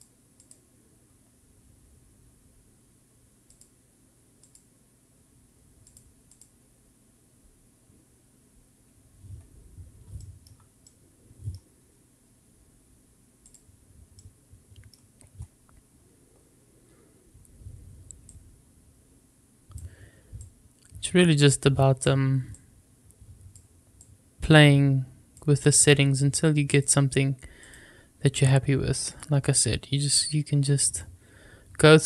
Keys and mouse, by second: 3.6-4.5 drag, 5.9 click, 10.1-10.5 shift+middle drag, 10.8-11.5 middle drag, 13.4 click, 14.4 middle click, 18.2-19.7 drag, 20.4-22.0 drag, 22.5-23.5 drag, 24.0-25.3 drag, 26.6-27.7 drag, 29.3-31.0 drag.